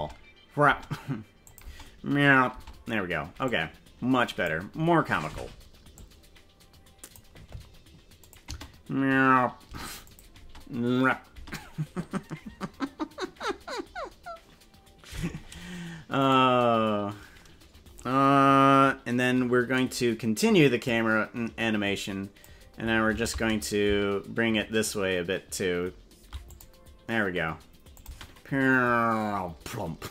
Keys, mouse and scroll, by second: 0.7 space, 1.4 click, 1.7 space, 2.5 space, 3.4-4.5 drag, 5.9-7.2 drag, 8.2 click, 8.5 space, 9.7 space, 10.0 click, 10.3 space, 11.3 space, 16.3 right click, 20.9-22.5 drag, 23.1 shift+`, 27.9-30.1 drag, 28.1 space.